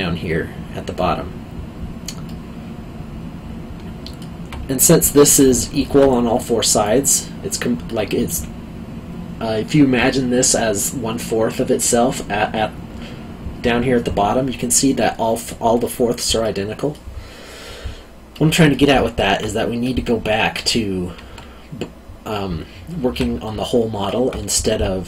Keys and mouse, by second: 2.2 middle click, 5.6 alt+middle click, 16.4 middle click, 18.9 alt+middle click, 23.6 alt+middle click.